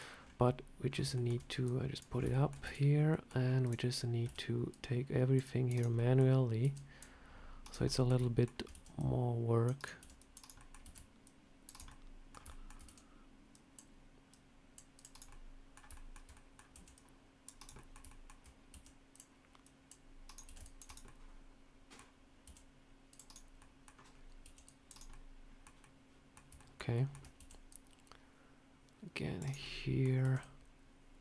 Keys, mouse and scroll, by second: 0.1 scroll down 2, 0.7 scroll down 3, 1.0 shift+middle click, 1.5 click, 2.0 scroll up 3, 2.2 shift+middle click, 2.5 Tab, 3.0 scroll up 1, 3.0 middle click, 3.5 click, 4.1 c, 5.8 middle click, 6.5 c, 7.8 middle click, 8.1 shift+middle click, 8.6 c, 9.9 c, 10.5 middle click, 10.7 c, 11.8 middle click, 12.4 shift+middle click, 12.7 c, 15.2 middle click, 15.8 shift+middle click, 16.2 middle click, 16.6 c, 17.6 middle click, 18.0 shift+middle click, 18.6 c, 20.3 c, 20.9 middle click, 22.3 c, 23.5 middle click, 23.5 scroll up 1, 24.0 scroll up 2, 24.3 c, 25.0 middle click, 25.7 middle click, 26.5 shift+middle click, 26.5 shift+middle click, 26.8 middle click, 27.3 c, 29.5 middle click, 30.1 c.